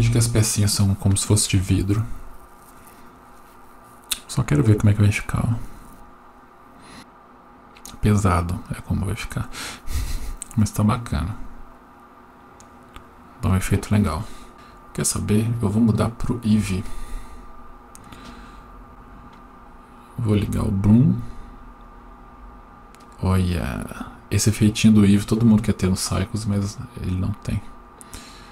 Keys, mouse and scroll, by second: 17.4 click, 18.3-18.9 scroll up 4, 18.9 click, 21.9 click, 23.4 click, 23.8 click, 24.3 click, 25.0 click, 25.6 click, 26.1 click, 26.6 click, 27.6 click, 28.2 click.